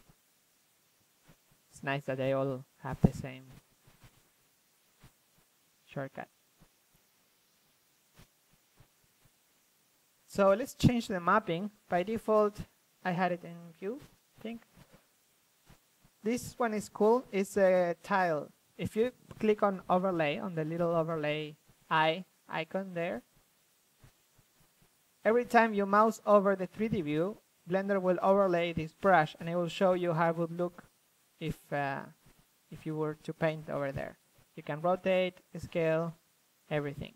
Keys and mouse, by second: 3.5 f, 3.8 middle click, 3.9-5.3 drag, 5.6 middle drag, 5.7-6.2 drag, 6.4-7.3 drag, 6.5 ctrl+f, 8.3 ctrl+z, 9.0 ctrl+z, 12.0 middle click, 14.3-15.3 drag, 18.1 ctrl+z, 18.6-20.8 drag, 21.6-23.4 middle drag, 23.4 f, 24.6 click, 24.6 f, 24.9 click, 25.5-25.9 drag, 25.5 f, 26.5-26.8 drag, 26.5 f, 27.3-28.0 drag, 28.0 middle drag, 28.1-29.1 drag, 30.6 middle click, 30.8-34.0 drag, 34.6 ctrl+f, 35.6 ctrl+f, 35.6-36.6 drag, 36.3 ctrl+f, 36.9 ctrl+f, 36.9-37.1 drag.